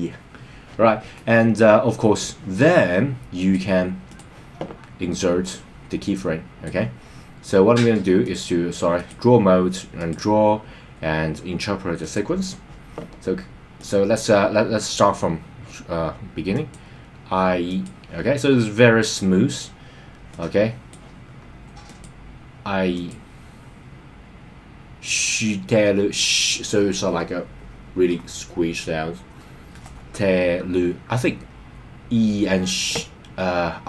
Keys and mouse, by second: 3.4 click, 5.4-6.6 drag, 8.3 click, 10.0-12.2 drag, 13.8 click, 16.7 click, 17.7 click, 20.3 click, 21.8 click, 22.9 click.